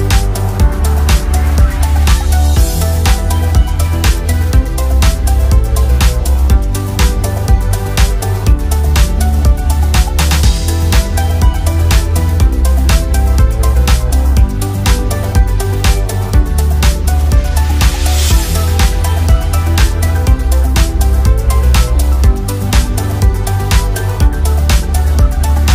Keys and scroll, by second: 11.3 ctrl+a.